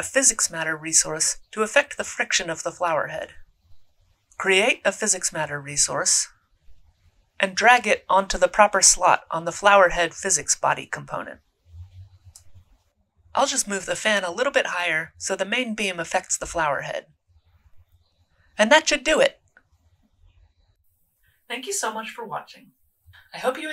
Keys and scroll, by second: 1.7-3.3 typing, 5.5-6.5 typing, 17.0 e.